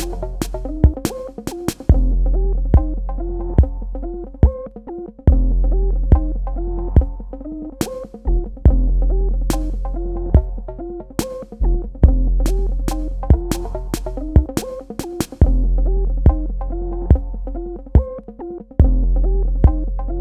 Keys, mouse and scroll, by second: 1.8 shift+click, 10.2 space, 10.4 click, 10.8 ctrl+click, 14.1 click, 19.0 click.